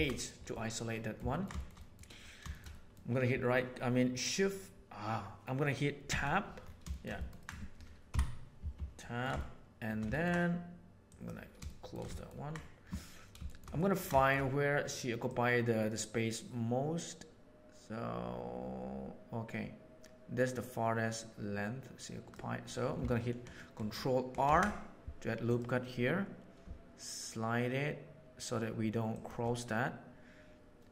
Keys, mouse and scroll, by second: 0.5-1.3 middle drag, 1.5 shift+middle click, 2.7 middle click, 6.0 Tab, 6.8 shift+middle click, 7.1 ctrl+middle click, 7.4 ctrl+middle click, 8.0 KP_1, 8.9 ctrl+middle click, 9.4 shift+middle click, 10.1 ctrl+middle click, 11.0 middle click, 11.6 shift+middle click, 12.1 ctrl+middle click, 13.4 shift+middle click, 13.7 ctrl+middle click, 14.1 shift+middle click, 15.2-22.3 drag, 24.4 ctrl+r.